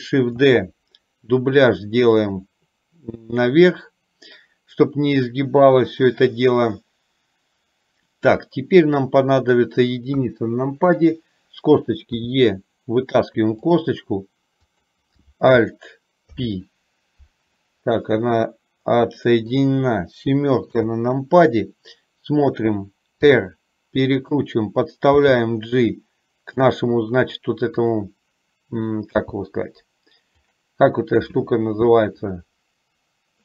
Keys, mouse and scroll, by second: 0.6 shift+d, 9.5 click, 10.4 KP_1, 12.4 e, 14.9 click, 16.5 alt+p, 18.6-19.7 middle drag, 20.7 KP_7, 23.4 r, 25.2 g, 27.9 click, 29.2 g.